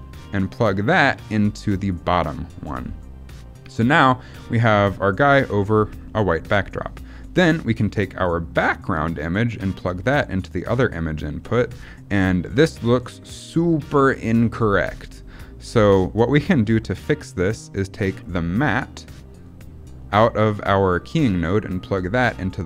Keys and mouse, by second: 0.3-1.8 drag, 3.8 middle click, 6.1 middle click, 8.2-10.3 drag, 11.4 middle click, 12.5 middle click, 15.3 middle click, 17.2 middle click, 18.5-22.4 drag.